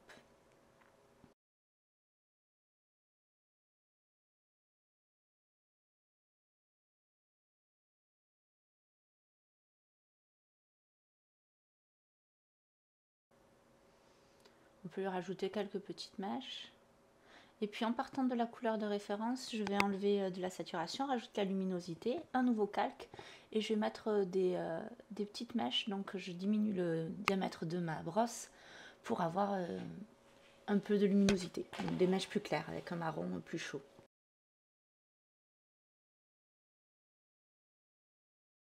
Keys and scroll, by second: 4.6 space, 14.5 ctrl+alt+z, 20.6 /, 38.5-38.6 typing.